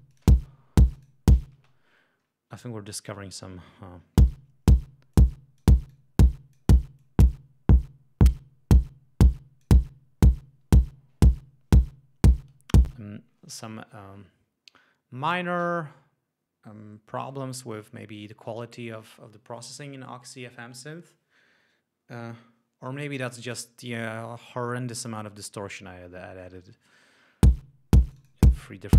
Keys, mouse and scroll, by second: 1.1 click, 1.6 space, 4.2 l, 5.2 click, 5.9 click, 7.0-9.8 drag, 12.9 space, 27.4 l, 28.1 click.